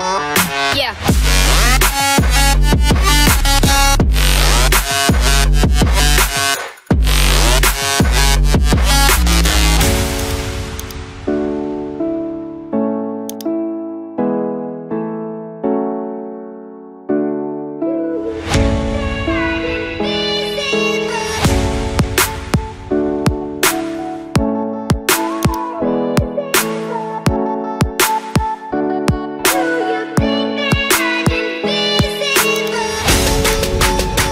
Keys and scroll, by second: 8.5 [, 8.7 [, 12.1 typing, 25.1 typing.